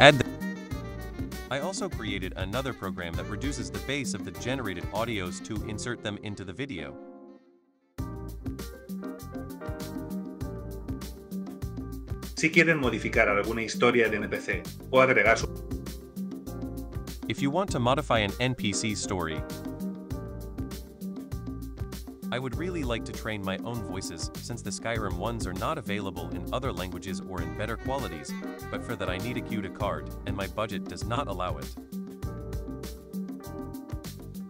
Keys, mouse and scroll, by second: 0.1 super+click, 2.5 super+click, 3.9 super+click, 4.3 super+click, 4.9 super+click, 5.4 super+click, 5.7 super+click, 6.9 super+click, 7.9 super+click, 8.1 super+click, 8.8 super+click, 9.5 super+click, 10.7 super+click, 11.4 super+click, 11.5 super+click, 15.3 super+click, 16.3 super+click, 16.5 super+click, 19.0 super+click, 19.3 super+click, 22.0 super+click, 22.5 super+click, 22.7 ctrl+super+click, 22.9 ctrl+super+click, 23.2 super+click, 23.4 ctrl+super+click, 23.8 super+click, 24.3 super+click, 25.1 super+click, 25.5 super+click, 26.2 super+click, 26.4 super+click, 27.2-28.3 super+drag, 28.8 super+click, 29.4 super+click, 29.9 super+click, 30.2 super+click, 30.6 super+click, 31.3 super+click, 31.8 super+click, 32.2 super+click, 32.8 super+click, 33.3 super+click, 33.7 super+click, 34.0 super+click, 34.4 super+click.